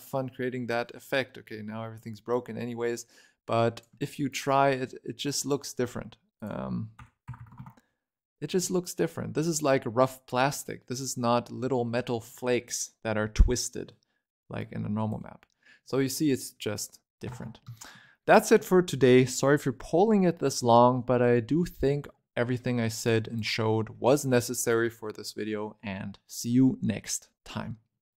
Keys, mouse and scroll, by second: 1.1-2.2 middle drag, 2.2-5.4 shift+drag, 6.2-7.2 drag, 7.2 0, 8.4 scroll up 1, 8.5-10.4 middle drag, 10.4 scroll up 3, 10.7 middle click, 11.1-11.5 scroll down 1, 11.6 scroll up 3, 11.9-13.0 scroll down 9, 12.1 middle click, 13.2 scroll up 6, 14.5 click, 15.7-16.4 scroll down 6, 16.4-17.1 scroll up 3, 17.1 a, 17.3 a, 17.6-20.8 shift+middle drag, 20.8-21.2 scroll down 9, 21.2-21.5 scroll up 5, 21.5-23.0 shift+middle drag, 23.0 click.